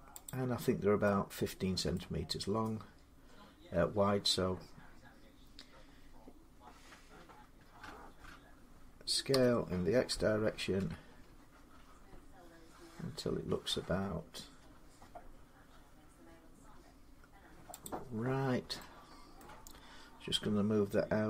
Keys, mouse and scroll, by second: 0.1 click, 1.8 middle click, 1.8 z, 2.6-3.8 scroll down 4, 6.9 middle click, 9.1 s, 10.6 x, 17.6 click, 19.2 middle click.